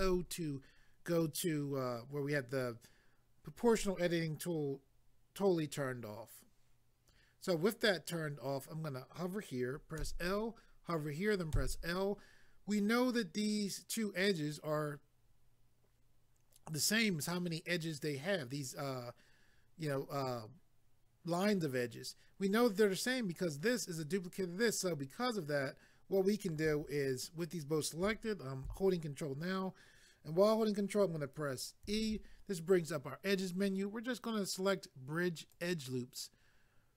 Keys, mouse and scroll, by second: 10.0 l, 31.8 ctrl+e, 35.5 click.